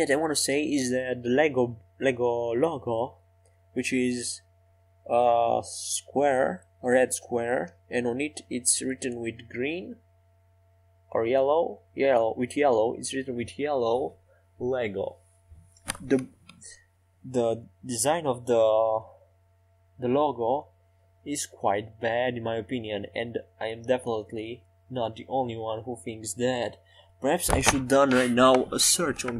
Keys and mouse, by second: 0.0 e, 2.6 Tab, 8.5 Tab, 11.6 e, 13.3 Tab, 17.5 Tab, 19.2 e, 19.7 s, 23.2-25.8 drag, 28.0 Tab.